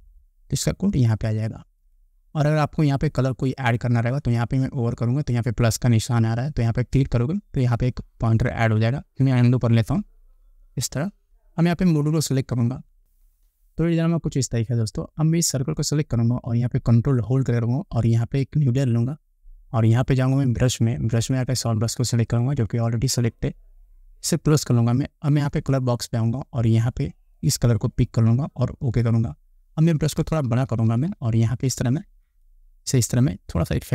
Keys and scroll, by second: 10.4 ctrl+z, 30.4 ].